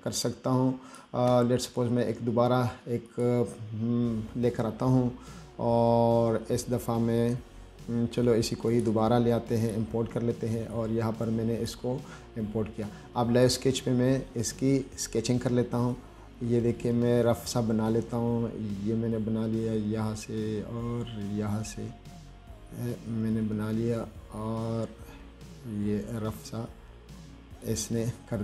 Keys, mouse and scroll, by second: 3.3 click, 9.0 click, 9.9 click, 11.0 click, 13.7 click, 16.2-27.9 drag.